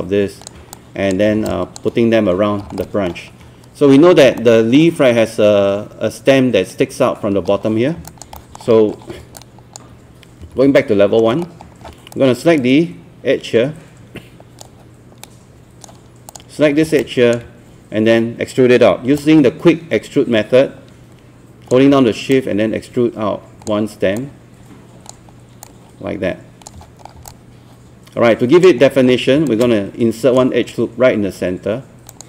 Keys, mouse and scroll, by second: 0.8 alt+click, 1.3 scroll down 1, 1.5 alt+click, 2.8 middle click, 2.8 alt+scroll down 1, 3.9 scroll up 1, 4.4 alt+middle click, 7.5 scroll down 1, 8.1 alt+click, 8.4 alt+middle click, 8.7 scroll up 1, 9.4 alt+click, 10.4 alt+1, 10.8 alt+middle click, 11.4-11.7 scroll up 2, 12.2-16.3 right drag, 16.3 click, 16.8 scroll down 2, 17.0 click, 19.2-21.7 alt+drag, 22.4-23.7 shift+drag, 24.2 shift+click, 25.6 shift+click, 27.1 scroll down 1, 27.3-28.6 alt+drag, 28.8 scroll up 1, 29.5 shift+right click.